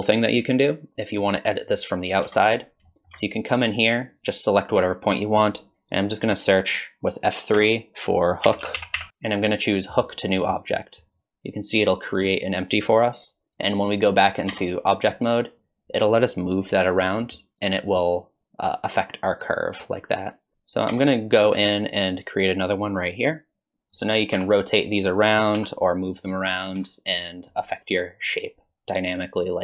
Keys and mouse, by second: 0.3 click, 2.3 Tab, 2.9 shift+middle click, 3.7 click, 7.6 F3, 8.8 o, 14.5 Tab, 15.6-16.7 drag, 16.7 g, 20.5 Tab, 20.9 Tab, 21.9 click.